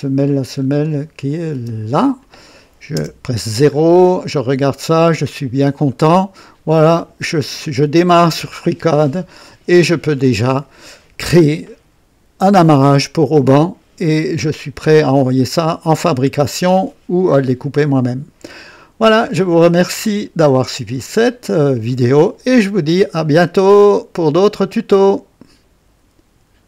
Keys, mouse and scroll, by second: 0.6 scroll up 2, 1.3 click, 1.6 space, 2.2 click, 3.0 KP_0, 3.8-4.1 scroll down 2, 4.4 right click, 5.4 scroll up 1, 5.9-6.6 right drag, 25.0 right click.